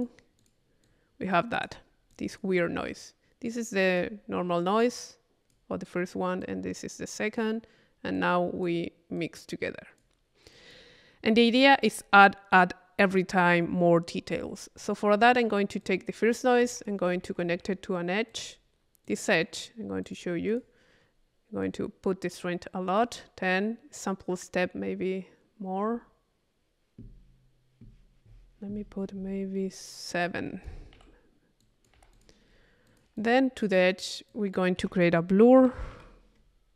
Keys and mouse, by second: 0.0 click, 0.4 click, 0.8 click, 2.1 click, 3.5 click, 4.6-5.8 drag, 6.4-7.8 drag, 8.1 click, 9.2 click, 10.5 click, 11.3 click, 15.8-17.4 drag, 16.7 Tab, 18.3 click, 19.1 click, 20.0 click, 21.0 click, 21.6-23.3 drag, 24.0 middle click, 25.8-29.8 middle drag, 30.2 click, 31.6 click, 32.9-34.0 drag, 34.3-35.4 drag, 34.8 Tab.